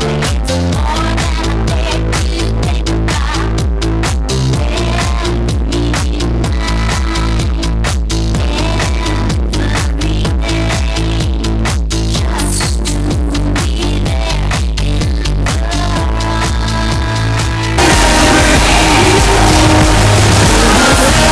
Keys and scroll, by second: 2.5 a, 2.7-4.0 Down, 4.2 Down, 5.1 Down, 5.1 Return.